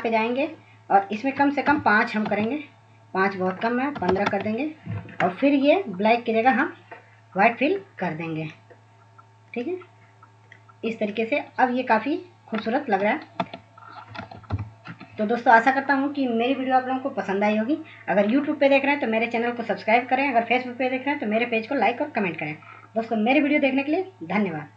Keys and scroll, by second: 1.8-4.9 typing, 13.2 Tab, 14.3 ctrl+alt+0.